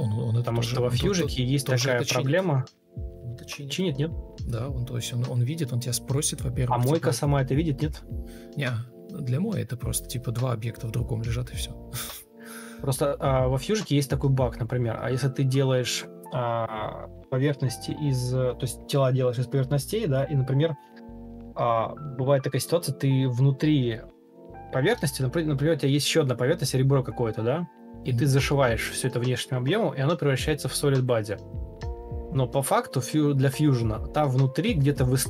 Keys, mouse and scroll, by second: 1.4 ctrl+d, 2.6 ctrl+space, 5.5 ctrl+d, 10.3 Escape, 10.7 ctrl+f, 18.1 ctrl+u, 19.0-21.1 typing, 22.0 Escape, 22.2 Delete, 23.8 Escape, 24.2 ctrl+click, 24.6 ctrl+space, 25.5 ctrl+space, 27.1 Escape, 27.3 Escape, 27.8 Escape, 28.6 ctrl+click, 32.2 Escape.